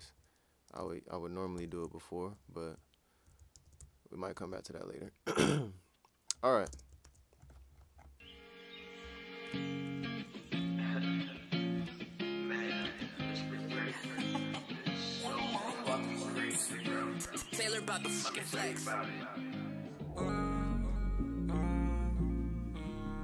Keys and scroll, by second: 0.0-1.5 typing, 3.5 super+s, 6.6 Return, 6.7 space, 7.0 super+s, 10.4 ctrl+Down, 10.6 ctrl+Down, 11.8 super+s, 13.0 super+s.